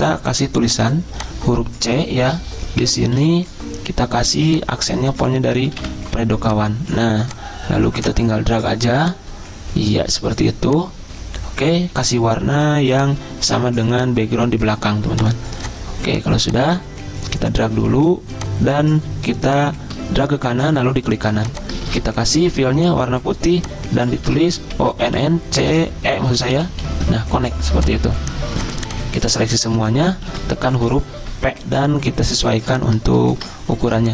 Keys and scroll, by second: 2.8 Caps_Lock, 3.2 c, 3.9 Escape, 5.4-6.3 typing, 9.0 typing, 21.8 ctrl+a, 24.3 ctrl+a, 24.8-26.9 typing, 30.3 ctrl+g, 30.8-31.9 typing.